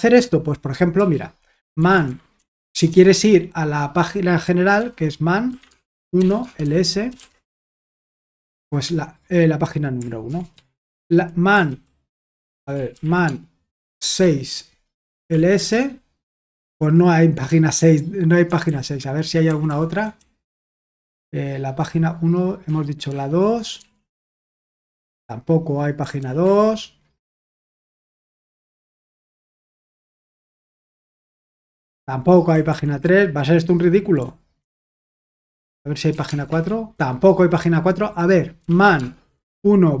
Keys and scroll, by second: 1.5-2.9 typing, 4.7-7.3 typing, 10.3-17.2 typing, 18.7 ctrl+p, 19.5 BackSpace, 19.7 BackSpace, 19.9 BackSpace, 20.1 BackSpace, 22.6-24.2 typing, 24.5 Return, 26.2 ctrl+p, 27.5 -, 29.7 alt+b, 30.5-31.3 typing, 32.7 ctrl+p, 34.6 alt+b, 35.2-36.2 typing, 38.6-40.0 typing.